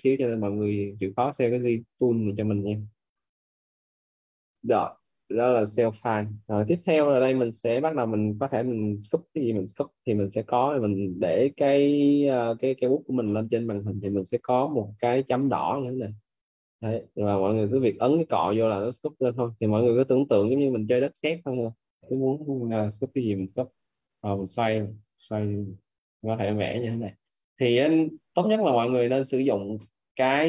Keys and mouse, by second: 15.8 click, 18.0 click, 22.3 right click, 23.0 click, 24.0 right click, 24.8 click.